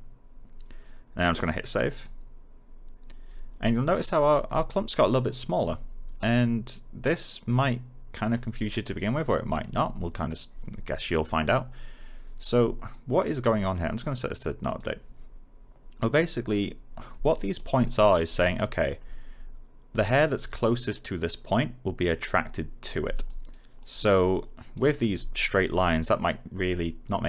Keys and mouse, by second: 1.8 click, 3.8 alt+click, 12.7 click, 17.8 alt+middle click, 18.2 alt+right click, 23.0 right click, 23.7 alt+click.